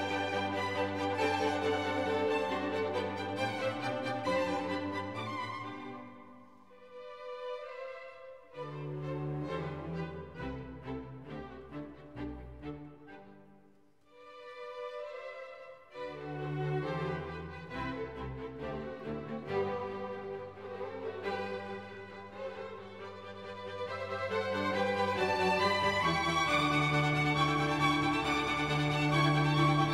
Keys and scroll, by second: 10.1 e, 17.4 F1, 20.8 Escape, 24.4 F1, 26.4 Escape.